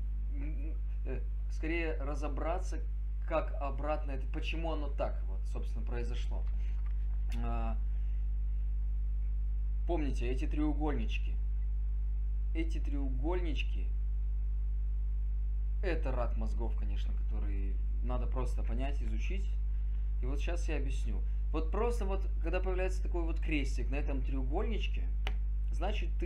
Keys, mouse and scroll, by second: 6.8 click.